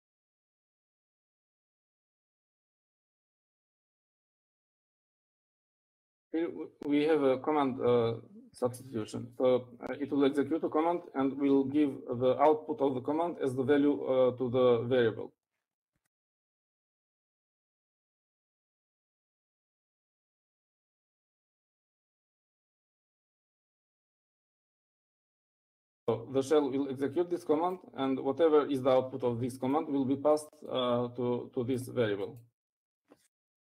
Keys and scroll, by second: 3.7-6.1 typing, 6.7 shift+Left, 17.3-18.4 typing, 20.0-22.6 typing.